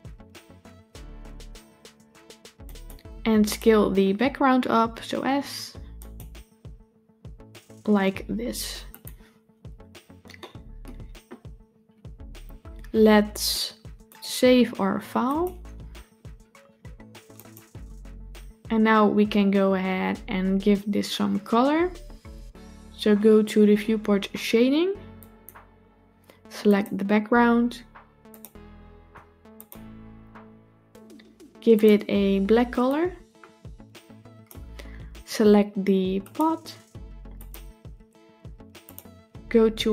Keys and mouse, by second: 4.4 s, 8.7 click, 10.2-10.7 shift+middle drag, 14.0-15.5 drag, 25.2 click, 26.6 click, 28.2 click, 29.4-30.5 drag, 37.2 click.